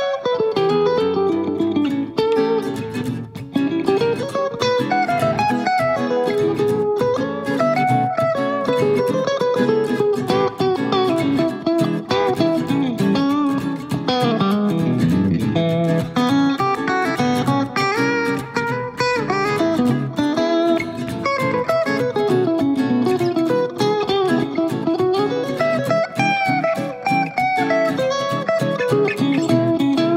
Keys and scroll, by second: 6.8 Page_Down, 8.1 super+d, 12.6 super+d, 24.5 6, 24.6 Return.